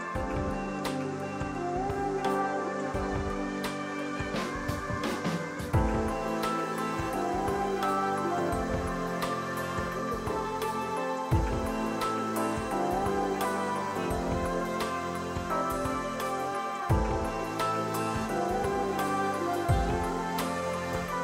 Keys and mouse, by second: 0.3 ctrl+1, 0.4 click, 3.9-6.5 typing, 4.2 click, 4.9 click, 6.3 click, 7.0 ctrl+z, 7.3 click, 7.6 ctrl+shift+x, 7.8 click, 9.0 KP_3, 9.1 Return, 10.1 click, 10.7 KP_0, 10.7 Return, 11.1 ctrl+z, 11.7 ctrl+q, 12.0 click, 12.2 ctrl+1, 12.3 click, 12.5 ctrl+click, 12.7 right click, 12.9 click, 13.2-14.3 typing, 13.9 click, 14.5 ctrl+1, 14.7 click, 15.2 Delete, 15.3 click, 16.9 KP_2, 17.1 Return, 17.9 ctrl+z, 18.2 click, 18.9 KP_3, 19.0 Return, 20.0 ctrl+z, 20.4 click.